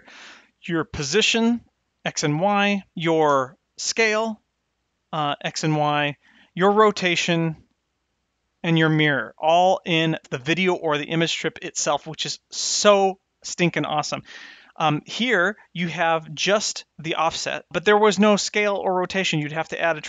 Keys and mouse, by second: 0.8-1.9 drag, 2.4-3.8 drag, 4.6 click, 5.4 click, 6.0 click, 7.1 click, 15.3 click, 17.0 click, 17.5 click, 17.7 drag, 19.2 click.